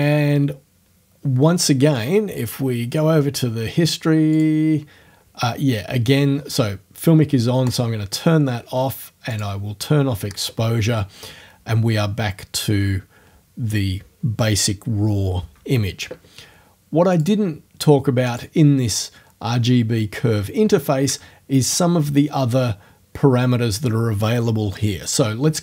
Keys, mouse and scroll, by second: 2.4 click, 4.4 click, 7.7 click, 9.3 click, 17.1 click, 18.3 click.